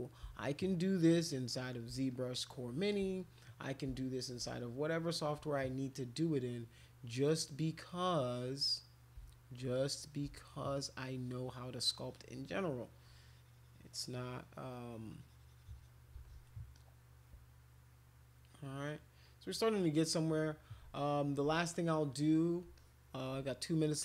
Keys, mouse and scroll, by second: 0.3-1.6 shift+drag, 2.1 click, 2.9 alt+click, 3.6 shift+click, 5.2 alt+click, 8.2 click, 8.4 click, 8.9 click, 9.7 click, 10.5-15.9 shift+drag, 16.2 alt+click, 16.8-20.1 drag, 21.3-22.4 alt+drag, 22.8 alt+click, 23.2 alt+click, 23.8 click.